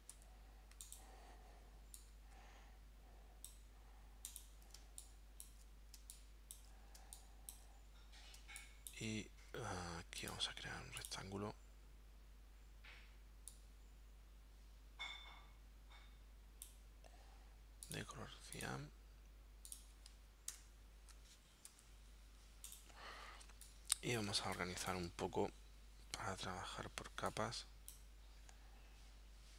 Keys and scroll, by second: 0.2 v, 4.8 space, 6.0 space, 7.0 space, 8.4 space, 20.5 shift+super+9, 21.7 v, 24.3 space.